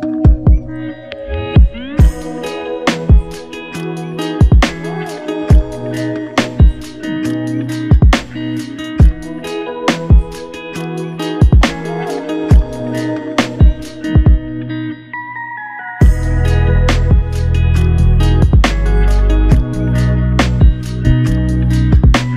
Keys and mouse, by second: 4.3 f, 10.3 shift+click, 11.5 alt+click, 13.5 ctrl+z, 14.0 ctrl+z, 14.6 ctrl+z.